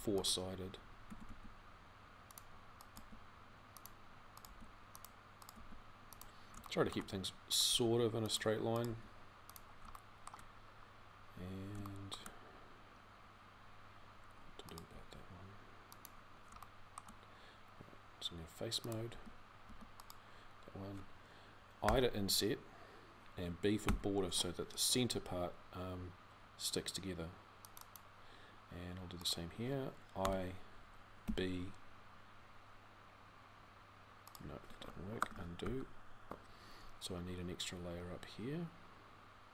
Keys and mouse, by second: 0.8 g, 2.8 g, 7.5 g, 12.1-16.3 drag, 18.9 a, 19.4 a, 21.6 i, 35.4 ctrl+z.